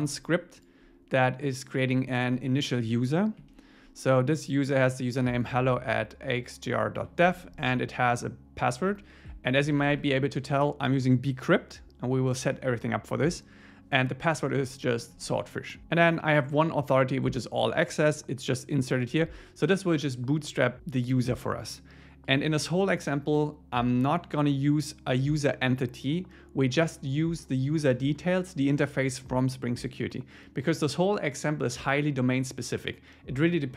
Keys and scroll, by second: 2.9 Up, 3.4 Down, 7.0 alt+shift+Right, 9.5 shift+Right, 10.1 shift+Right.